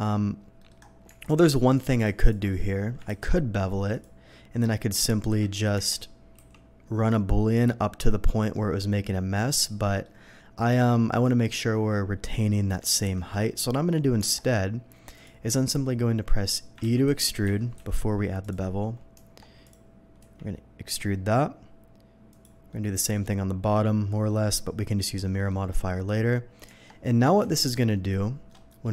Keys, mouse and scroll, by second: 0.6 middle click, 1.7 click, 2.2 alt+click, 3.0 ctrl+b, 3.9 click, 4.6 middle click, 5.3 KP_3, 5.7 Tab, 6.3 d, 7.1-8.4 drag, 8.5-8.9 middle drag, 9.5 click, 9.9 middle drag, 12.7 scroll down 1, 12.9 ctrl+z, 14.2 Tab, 15.1 click, 16.8 ctrl+z, 17.1 ctrl+z, 18.4 click, 19.1 Tab, 19.6 click, 20.2 e, 22.3 click, 22.7 middle click, 24.3 middle click, 25.2 middle click, 26.7 Tab, 27.1 middle click, 27.6 alt+click, 28.5 alt+middle click, 28.7 alt+middle click.